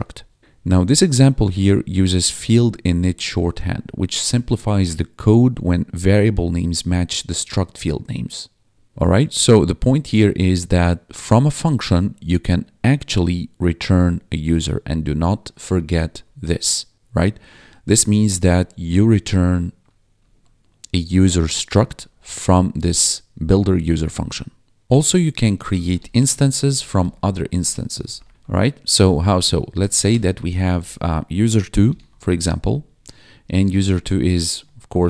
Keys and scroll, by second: 16.1 1, 17.5 1, 20.3 1, 22.0 1, 24.9 ctrl+/, 25.0-30.4 typing, 31.6-35.0 typing.